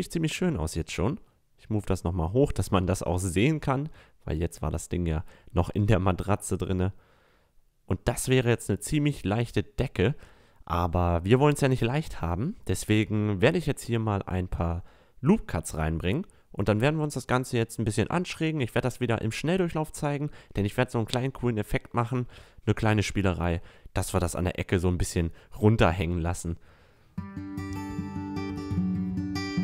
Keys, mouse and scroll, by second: 1.7 click, 5.9 a, 6.2 Tab, 6.7-8.4 middle drag, 9.7 Tab, 12.1 ctrl+r, 15.4 ctrl+r, 17.1 middle click, 17.2 click, 18.4 ctrl+r, 20.1-27.8 typing, 20.4 ctrl+r, 20.7 right click, 20.8 click, 20.9 right click, 21.2 click, 21.8 click, 23.0 ctrl+r, 23.3 click, 23.6 ctrl+r, 23.9 click, 25.6 Tab, 26.3 right click, 26.4 Tab, 27.2 right click, 27.3 Tab, 28.0-28.3 drag, 28.7 ctrl+r, 29.0 click, 29.1 k.